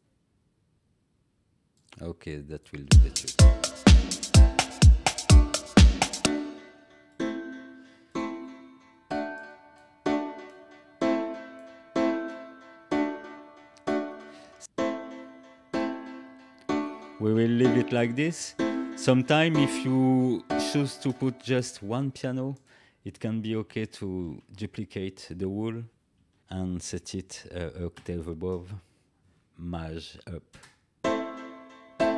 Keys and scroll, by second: 2.8 space, 14.6 space, 20.9 space, 24.1 ctrl+a, 26.4 ctrl+v, 30.5 space.